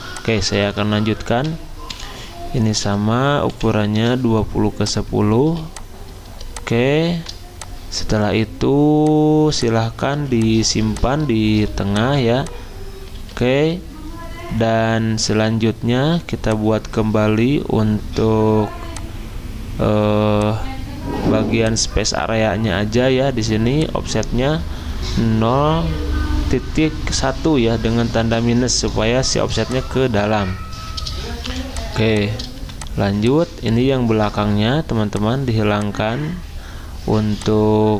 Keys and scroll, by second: 0.6 ctrl+a, 1.7-4.0 typing, 5.5-7.1 typing, 10.1 z, 11.5 v, 13.2 ctrl+z, 31.4 z, 32.6 v, 34.0 ctrl+z.